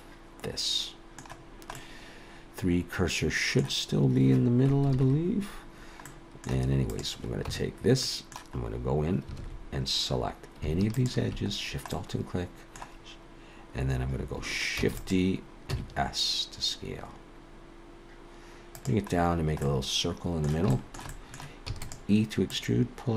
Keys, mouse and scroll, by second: 1.4-1.8 scroll down 1, 1.8 middle click, 4.9 ctrl+KP_3, 6.0 middle click, 6.9 click, 7.5 Tab, 8.1 middle click, 8.6-9.3 scroll up 1, 9.3 scroll up 1, 9.4 alt+a, 9.9 scroll up 2, 10.9 alt+shift+click, 11.6-11.9 scroll down 2, 11.9 middle click, 14.8 shift+d, 15.7 s, 19.4-19.9 scroll down 2, 19.6 middle click, 20.7 shift+middle click, 21.1 middle click, 21.7 e, 22.5 click.